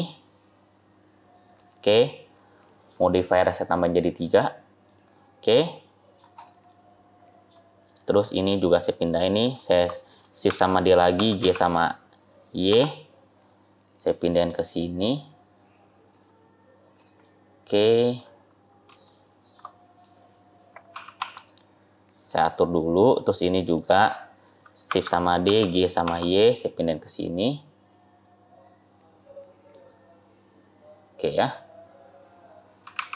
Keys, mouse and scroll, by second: 1.7 middle click, 4.1 click, 4.8 middle click, 6.3 click, 6.5 middle click, 8.2-9.0 scroll down 2, 9.2 click, 10.3 shift+d, 16.8 click, 17.1 middle click, 18.2-18.6 scroll up 2, 18.8 scroll up 1, 18.9 shift+middle click, 19.9 click, 20.8 g, 22.5-23.6 scroll down 5, 22.9-23.6 scroll up 3, 23.6 click, 24.8 shift+d, 30.4-31.1 scroll down 2, 31.1-32.7 scroll up 2, 32.7 g.